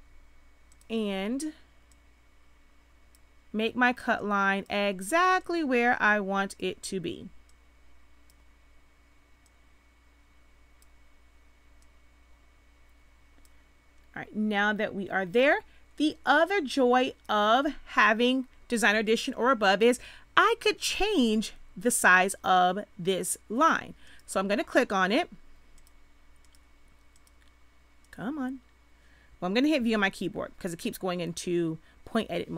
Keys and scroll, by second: 29.7 v.